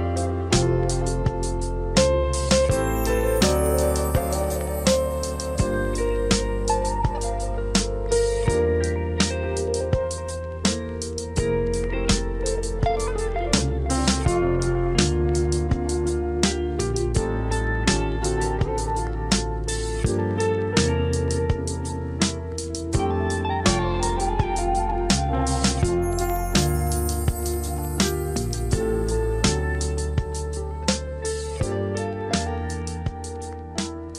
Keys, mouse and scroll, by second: 1.5 j, 6.9 click, 10.0 click, 13.3 click, 16.4-22.7 drag, 22.7 click.